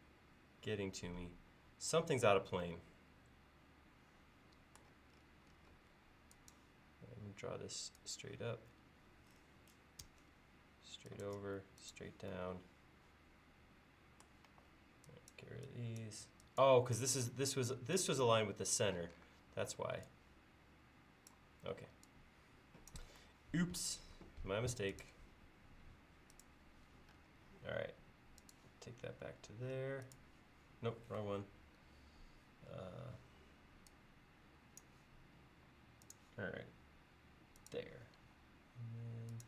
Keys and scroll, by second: 5.9 l, 14.5 e, 19.1 p, 21.8 e, 24.2 l, 27.5 l, 35.5 l, 38.2 l.